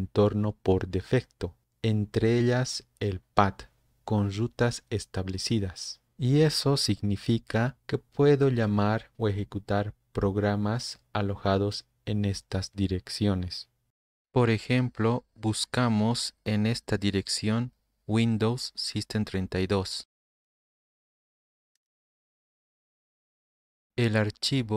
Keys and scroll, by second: 15.4 ctrl+Insert, 16.0 alt+Tab, 18.4-20.4 typing, 20.4 End, 21.5-22.4 typing, 23.4-24.1 Down.